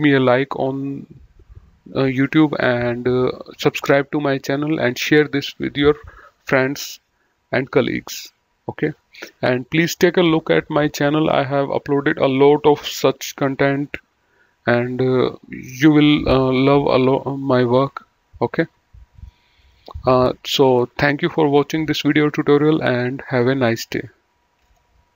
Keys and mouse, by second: 19.2 click, 24.9 F10.